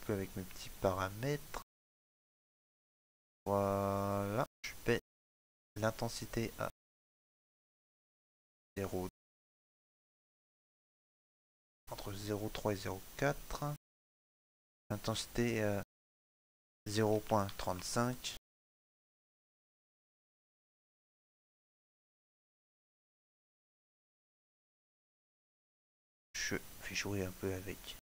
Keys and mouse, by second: 19.1 middle click, 21.6 click.